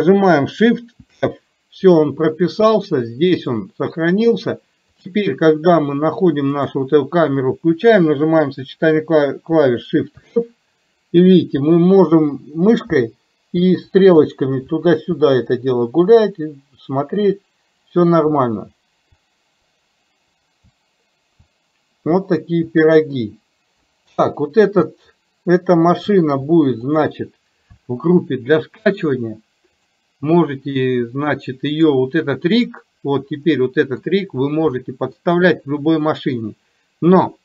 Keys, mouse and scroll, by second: 10.3 shift+f, 29.9 click, 31.8-32.8 drag, 33.4-34.0 middle drag, 34.8-35.1 middle drag, 36.1-37.3 middle drag.